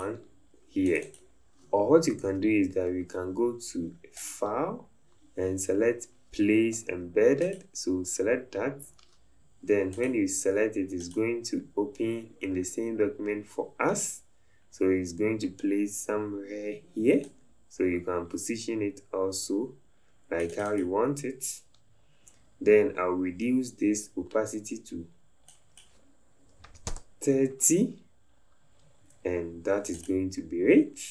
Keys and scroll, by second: 2.3 Delete, 26.7 KP_3, 27.1 Return.